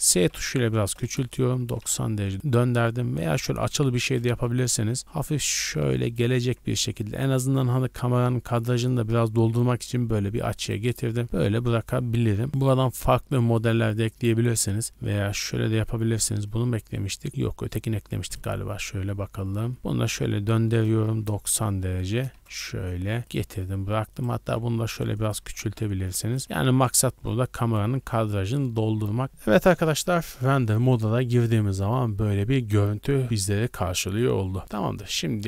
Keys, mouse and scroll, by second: 0.0-2.3 typing, 1.0 KP_Enter, 2.3 click, 3.6 click, 3.9 g, 4.3 shift+z, 6.0 click, 6.5 a, 6.6 a, 10.6 right click, 13.5 click, 15.0 click, 19.7 middle click, 19.9 scroll down 1, 19.9-22.3 typing, 21.4 KP_Enter, 23.2 click, 23.4-26.4 typing, 24.1 right click, 25.1 click, 26.2 click, 27.6 click, 27.8 a, 28.0 a, 28.6 z.